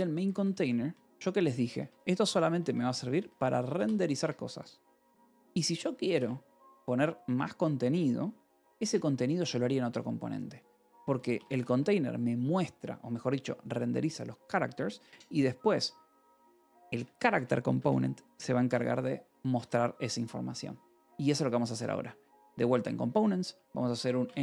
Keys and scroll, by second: 0.0-3.8 typing, 1.8 Return, 4.1 Escape, 6.7 shift+v, 8.8 Escape, 10.9 k, 11.5 j, 14.5 Escape, 15.2-16.8 typing, 17.6 Escape, 19.5 w, 22.2 ctrl+c, 23.6-24.4 typing.